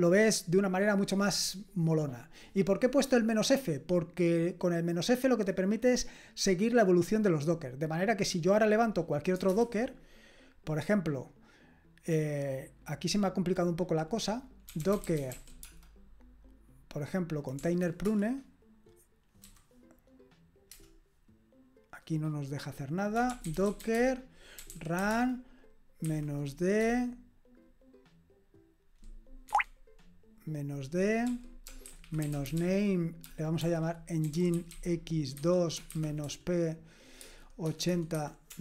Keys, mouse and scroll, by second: 9.5 super+Return, 14.5-15.8 typing, 17.6 Right, 18.0 Return, 22.9-26.8 typing, 29.5 Escape, 31.3-38.6 typing.